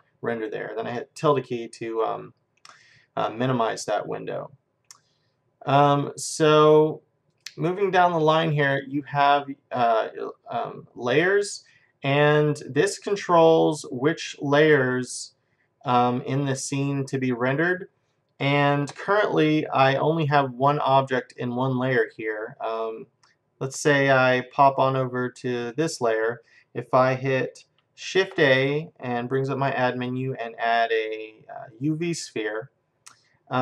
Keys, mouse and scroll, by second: 3.2-6.2 middle drag, 7.3-10.6 drag, 12.2-14.8 middle drag, 25.6-27.5 drag, 28.2 shift+a.